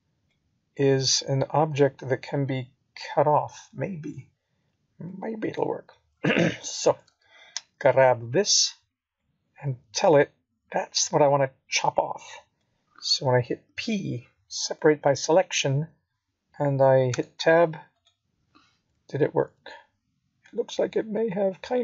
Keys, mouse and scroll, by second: 2.7 scroll down 2, 4.2 middle click, 6.3 click, 7.8 shift+click, 9.5 right click, 10.9 middle click, 14.5 z, 15.9 middle click, 17.8 click, 18.8 middle click.